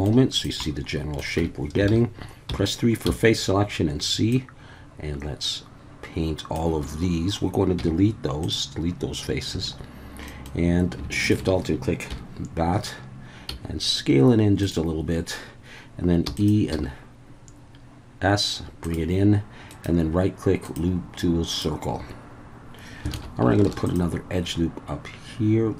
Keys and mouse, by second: 0.6-1.2 middle drag, 1.8 Tab, 1.9 alt+a, 2.5 3, 3.1 c, 6.9 Escape, 7.8 x, 9.5 2, 10.3 middle click, 12.1 KP_1, 13.5 s, 14.6 click, 16.3 e, 16.4 click, 16.7 s, 18.8 click, 19.8-21.6 right drag, 23.1 alt+a, 23.7 ctrl+r.